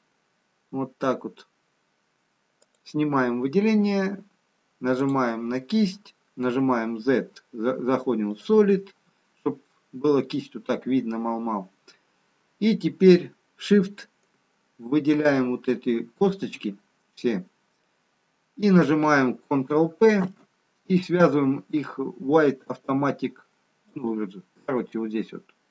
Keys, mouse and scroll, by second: 0.6 click, 1.7-3.2 scroll up 1, 3.2 click, 4.0-4.8 scroll down 1, 5.1 click, 6.9 z, 9.3-10.7 scroll up 2, 10.7-12.4 scroll down 1, 15.5 shift+click, 20.2 ctrl+p.